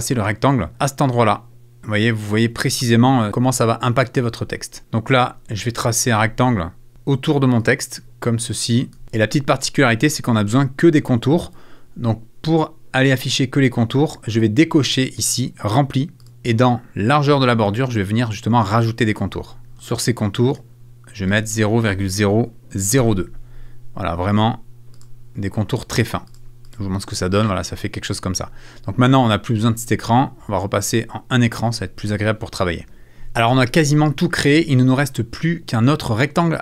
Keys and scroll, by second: 22.7 BackSpace, 23.0 2.